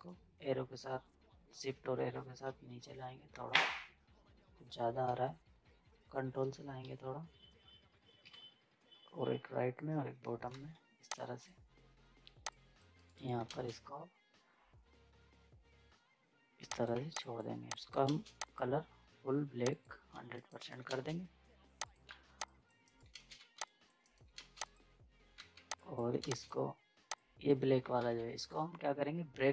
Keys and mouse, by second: 2.4 shift+Down, 4.8 shift+Down, 5.0 z, 6.8 ctrl+Down, 10.5 z, 11.1 click, 12.9 right click, 13.5 space, 16.7 click, 16.9 z, 17.2 click, 18.0 space, 18.4 click, 20.1 z, 20.3 right click, 20.9 ctrl+space, 21.8 click, 22.1 z, 22.4 click, 22.8 right click, 23.1 space, 23.3 z, 23.6 click, 24.0 right click, 24.4 space, 24.6 click, 24.6 click, 25.3 z, 25.7 click, 26.2 ctrl+space, 26.3 ctrl+click, 28.0 ctrl+z.